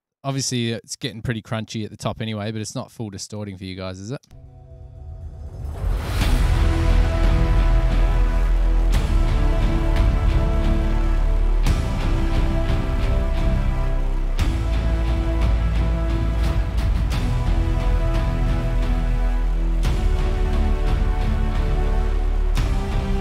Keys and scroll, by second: 4.5 space.